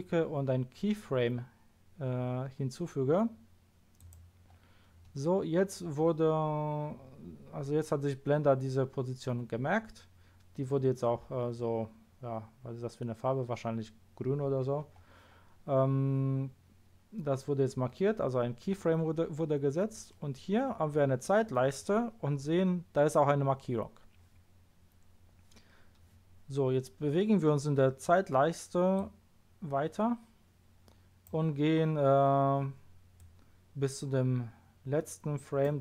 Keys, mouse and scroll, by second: 4.0 click, 29.0-29.8 drag, 33.2-33.9 drag.